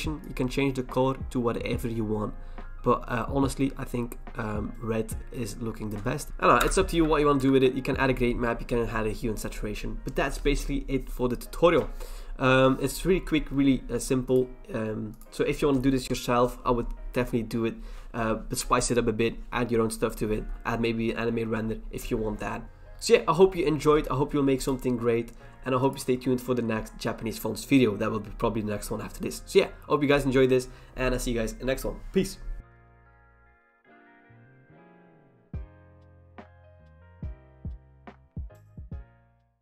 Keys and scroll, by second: 6.3 BackSpace.